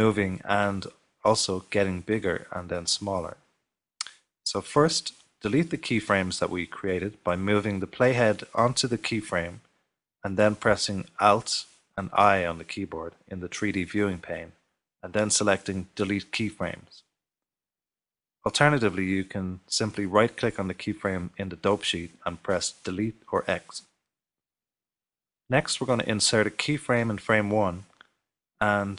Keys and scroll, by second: 13.5 alt+i, 22.4 x.